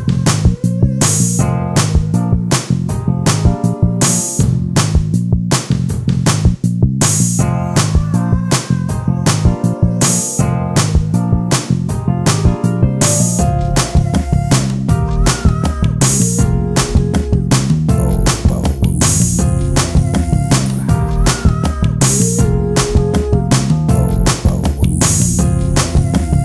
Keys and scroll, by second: 9.8 space, 11.3 space, 12.0 space, 13.2 space, 14.5 alt+space, 18.8 space, 20.8 space, 26.2 ctrl+space.